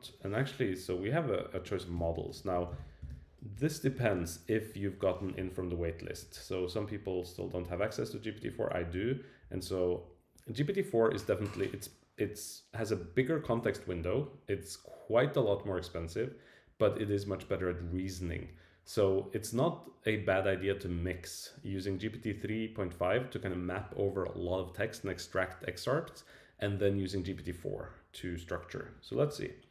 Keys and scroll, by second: 1.9 Return, 3.5 Return, 3.8 Right.